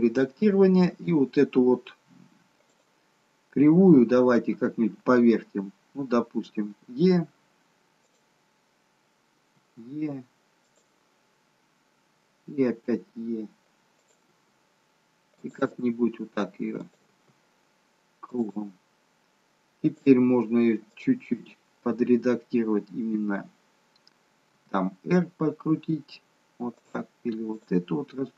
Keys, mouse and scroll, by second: 0.9 scroll up 1, 2.8 click, 6.7 e, 8.5-8.9 scroll down 3, 9.4 e, 11.1 scroll down 1, 12.7 e, 15.8 e, 17.1 e, 19.9 click, 20.9 click, 24.9 r, 27.5 click.